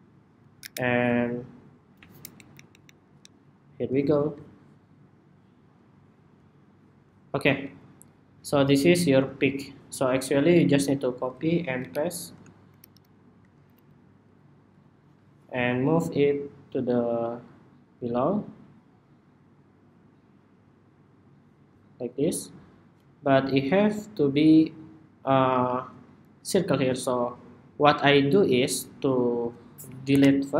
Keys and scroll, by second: 0.3 super+=, 11.2 super+c, 11.5 super+v, 12.8 super+v.